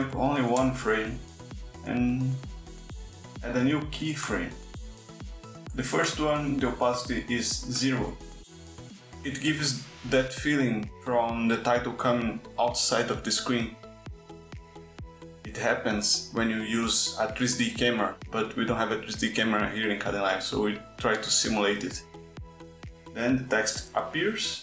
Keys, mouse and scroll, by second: 0.6 Right, 4.0 click, 5.2 click, 6.1 click, 23.1 Right.